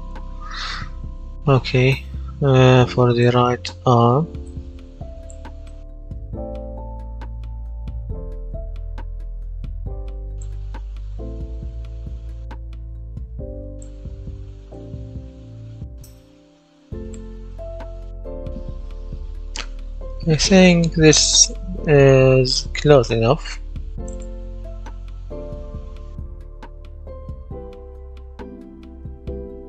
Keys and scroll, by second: 5.5 a, 5.8 a, 6.3 w, 6.8 s, 10.6 d, 11.7 w, 17.1-20.0 typing, 24.8 d, 25.1 w, 27.0 s, 28.2 w, 28.8 d.